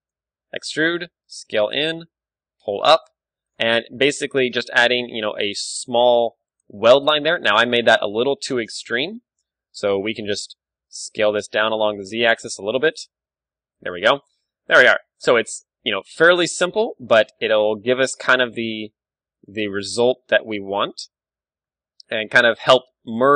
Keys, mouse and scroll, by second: 0.3 e, 1.2 s, 2.0 click, 2.1 g, 2.8-5.3 drag, 3.7 Tab, 4.9 KP_1, 5.4 Tab, 5.7 z, 6.5-8.2 drag, 7.5 ctrl+z, 8.2 ctrl+KP_Add, 8.6 ctrl+KP_Add, 9.2 z, 10.8 s, 12.6-14.4 drag, 12.6 z, 13.5 Tab, 14.4-16.9 middle drag, 15.4 KP_1, 15.9 Tab, 16.3 z, 16.9-18.7 right drag, 17.9 s, 19.5-22.7 drag, 19.6 g, 21.0 z, 21.6 Tab, 22.7-23.3 middle drag.